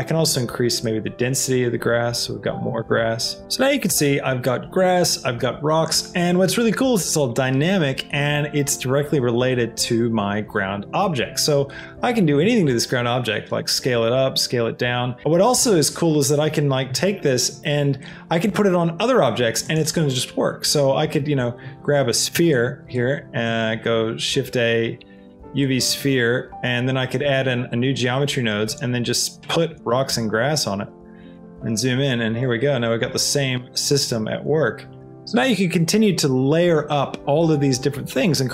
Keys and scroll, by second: 12.4 s, 17.0 z, 23.4 a.